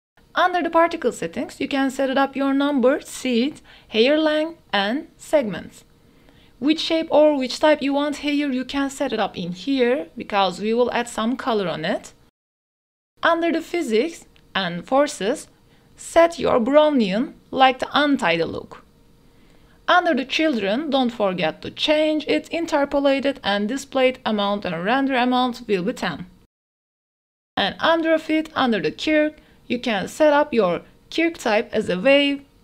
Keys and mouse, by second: 1.0-2.2 drag, 2.1 KP_0, 4.3-5.5 drag, 6.2-8.1 drag, 8.4 click, 10.7 click, 11.3 click, 14.9 click, 16.5-19.6 drag, 22.0 click, 24.8-25.9 drag, 28.7 click, 29.9-31.8 drag.